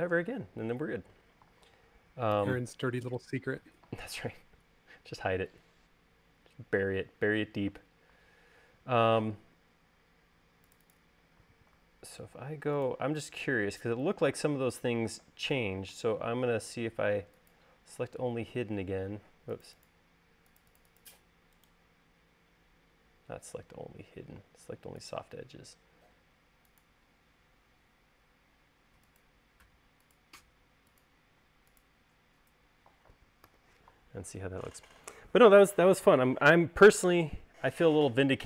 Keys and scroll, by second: 3.3 u, 13.1 super+a, 34.3 u.